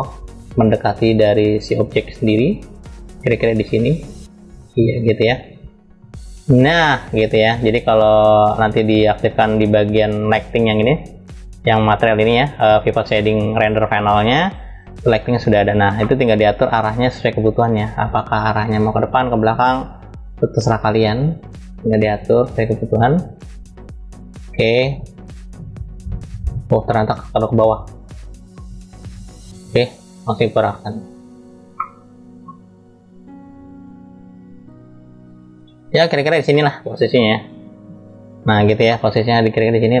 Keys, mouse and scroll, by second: 0.2 click, 1.3-1.7 scroll up 2, 2.7 click, 2.7 scroll up 1, 4.2 click, 6.6 scroll down 1, 7.6 scroll down 1, 7.8 click, 14.5-14.8 drag, 16.2-18.3 middle drag, 18.3-18.6 scroll down 1, 20.3-23.1 drag, 24.0-26.7 drag, 27.3-29.4 middle drag, 29.4 click, 30.3-31.4 drag, 31.5-32.7 middle drag, 32.7 click, 33.7 click, 35.0 click, 36.2-37.4 middle drag, 37.4 scroll up 1, 38.5-40.0 middle drag, 38.5 scroll up 3.